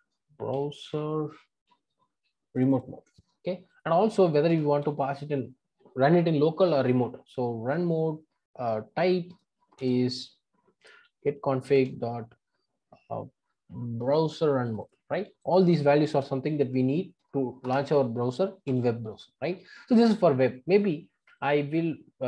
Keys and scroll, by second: 9.8 Return, 17.7 Return.